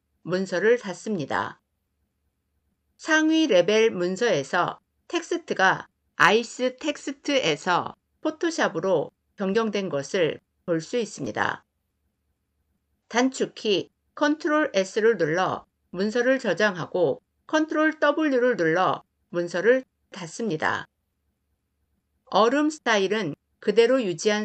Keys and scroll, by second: 13.0 ctrl+s, 17.2 ctrl+w.